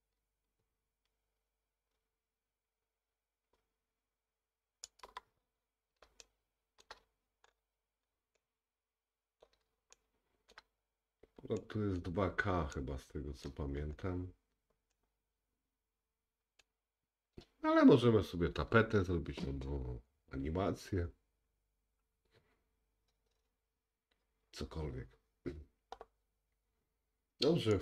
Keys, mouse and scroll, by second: 7.5-8.4 scroll up 3, 8.4 middle click, 10.0 shift+middle click, 10.7-27.8 middle drag, 11.0-11.4 scroll down 1, 13.9-14.4 scroll up 2.